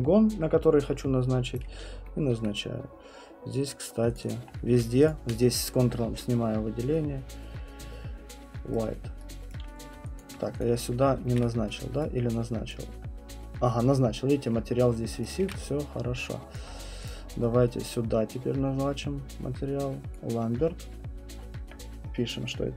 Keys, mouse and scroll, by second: 1.5 right click, 2.3 alt+middle click, 2.7 middle click, 4.1 click, 4.3 click, 4.5 middle click, 4.8 middle click, 5.0 alt+middle click, 8.7 right click, 9.5 right click, 10.2 alt+click, 10.6 click, 11.3 ctrl+1, 12.0 right click, 12.7 click, 15.2 right click, 15.4 ctrl+1, 15.9 middle click, 16.6 alt+click, 17.1 click, 20.1 right click, 22.5 click.